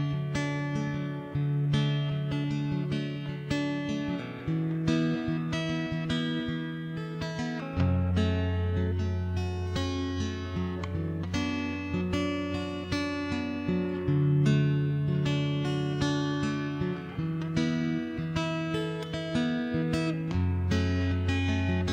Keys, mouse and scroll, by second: 0.2 middle click, 1.0 right click, 1.4 ctrl+j, 1.6 middle click, 1.6 shift+space, 2.1 middle click, 2.9 middle click, 4.1 middle click, 4.3 middle click, 4.5 middle click, 5.3 middle click, 5.9 ctrl+s, 5.9 middle click, 6.3 a, 7.4 click, 8.2 0, 8.6 1, 8.8 0, 8.8 middle click, 9.1 right click, 9.4 click, 9.4 middle click, 9.9 right click, 10.0 shift+space, 10.3 right click, 10.5-11.7 middle drag, 11.3 click, 11.9 right click, 12.1 x, 12.7 right click, 14.1 1, 14.3 right click, 15.4-18.3 typing, 16.0 right click, 17.0 right click, 19.7 right click, 19.9 click, 20.1 right click, 20.5 middle click, 20.8 middle click, 21.2 right click, 21.8 shift+s.